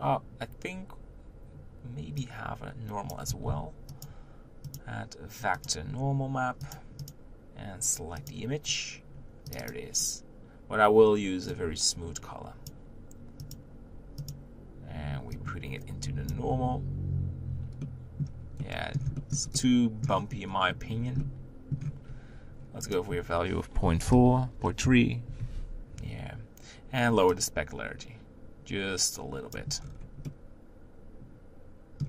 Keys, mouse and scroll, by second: 3.5 shift+d, 5.6-8.5 drag, 14.4-18.3 drag, 18.3-20.4 middle drag, 20.4-21.2 scroll up 3, 21.2-22.3 middle drag, 22.3 scroll up 1, 24.8-29.8 drag, 29.8 scroll down 1, 30.3-31.7 middle drag.